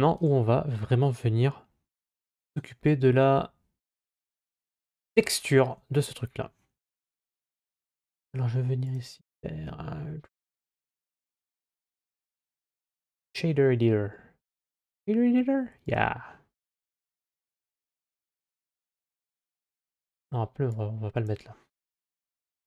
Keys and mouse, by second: 0.0 right click, 4.2 click, 7.0 click, 8.8-12.9 drag, 15.7 click, 17.0 middle click, 20.6 click, 22.6 click.